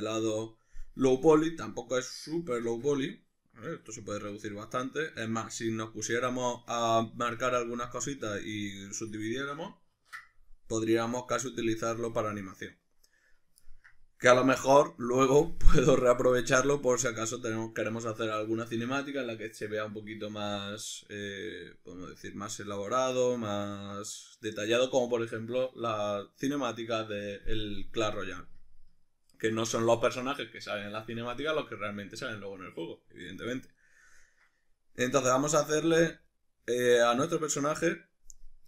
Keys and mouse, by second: 2.6 Tab, 10.0 ctrl+2, 12.0-13.3 drag, 13.3-17.6 middle drag, 28.0-38.6 middle drag, 35.7 a.